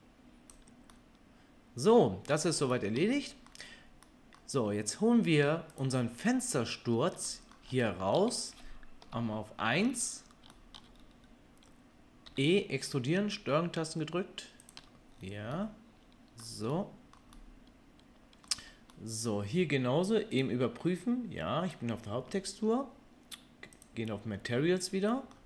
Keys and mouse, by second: 0.0-5.8 drag, 5.8-12.1 middle drag, 9.0 KP_1, 12.3-14.8 middle drag, 12.3 e, 15.3-23.8 middle drag, 23.8 click, 24.0-25.4 middle drag.